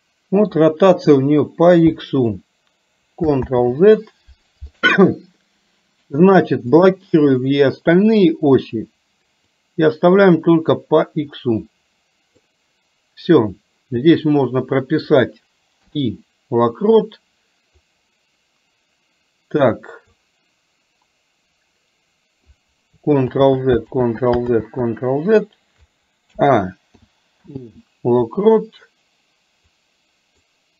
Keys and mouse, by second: 3.5 ctrl+z, 6.9 click, 9.6-12.5 drag, 17.9-20.3 drag, 23.4 ctrl+z, 24.1 ctrl+z, 24.6 ctrl+z, 26.4 a, 27.0 i, 27.5 i, 29.9 click.